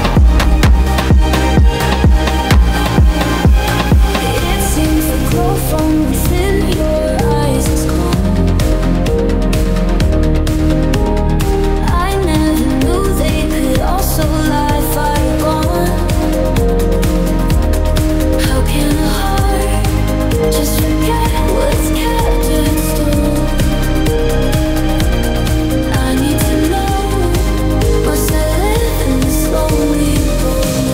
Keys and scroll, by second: 2.0 i, 12.8 ctrl+g, 26.8 i.